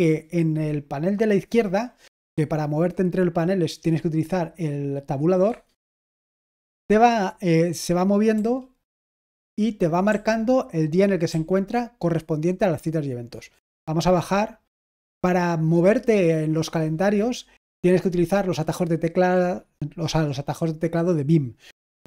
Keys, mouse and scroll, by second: 5.4 Tab, 9.2-10.0 typing, 11.2 typing.